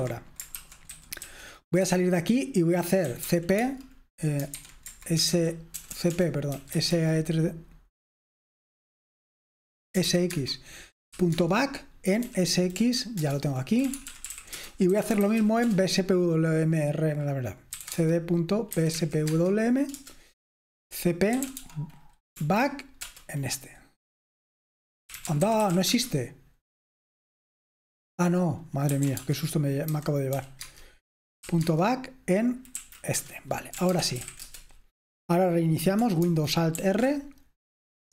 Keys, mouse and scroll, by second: 0.0-38.1 typing, 0.0 Escape, 1.8 Return, 13.2 Return, 20.0 Return, 22.4 Right, 23.0 Return, 36.8 alt+super+r.